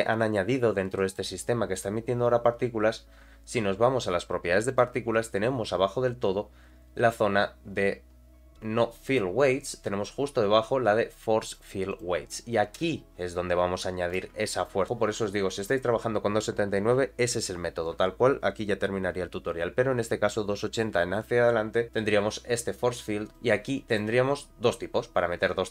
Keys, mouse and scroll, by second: 0.4-0.9 scroll down 3, 0.9 middle click, 4.7 click, 5.4-6.0 scroll down 4, 6.9 scroll down 6, 9.0 click, 9.0 scroll down 5, 9.7-10.0 scroll down 2, 11.9 click, 12.4-12.8 scroll down 3, 13.7 scroll down 3, 14.2 space, 14.9 click, 16.6-18.1 scroll down 2, 22.1-23.1 scroll down 1, 23.3 click, 24.3-24.8 scroll down 2.